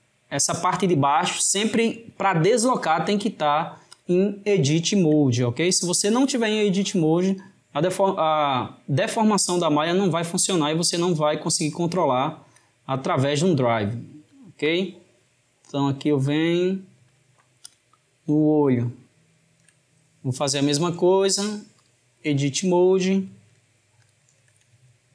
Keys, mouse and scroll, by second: 1.6-4.1 drag, 5.8 click, 9.1 click, 14.7-17.8 drag, 20.8-23.4 drag, 24.1 shift+click.